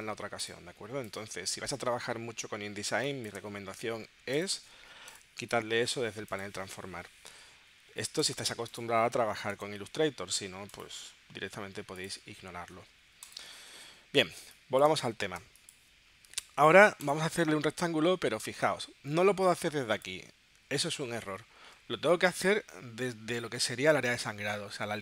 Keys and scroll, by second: 3.4 space, 9.5 Delete, 14.9 space.